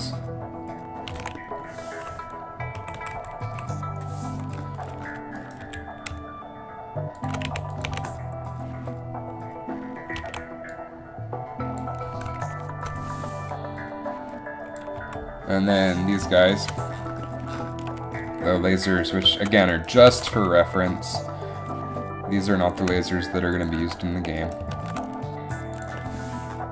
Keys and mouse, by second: 1.4 alt+a, 2.9 Right, 3.1 Right, 3.3 Right, 3.6 Left, 5.7 g, 7.6 a, 8.1 alt+a, 10.4 alt+a, 15.1 Down, 19.5 Down, 20.2 shift+d, 24.5 right click, 24.8 shift+d.